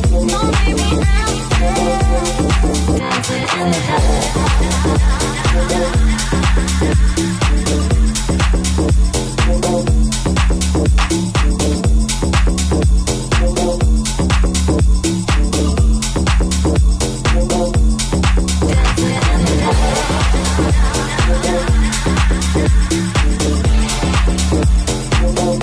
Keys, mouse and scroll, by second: 1.1 right click, 1.1-6.9 middle drag, 2.1 alt+z, 4.4 g, 6.3 KP_7, 6.9-24.9 middle drag, 8.6 alt+z, 10.7 g, 13.2 shift+c, 14.3 shift+c, 24.9 right click, 24.9-25.6 middle drag, 25.5 Tab.